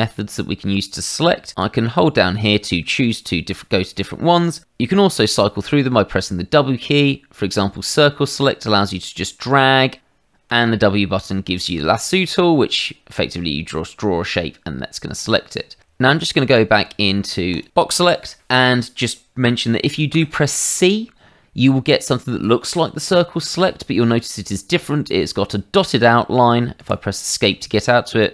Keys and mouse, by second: 1.6 click, 3.4 Escape, 5.8 w, 7.7 click, 10.5 w, 11.6 click, 16.1 w, 16.7 w, 17.5 click, 20.1 c, 26.8 Escape, 28.0 click.